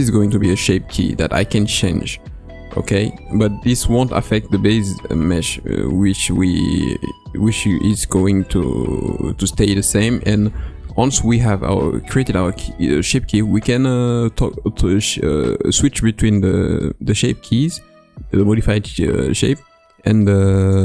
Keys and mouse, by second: 20.6-20.8 drag.